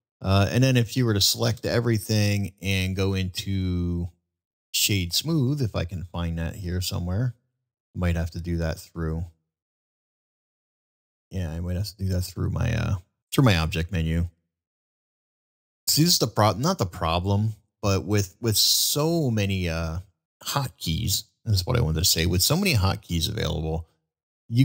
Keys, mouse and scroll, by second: 20.1 middle drag, 20.6-21.4 middle drag, 24.3 middle drag.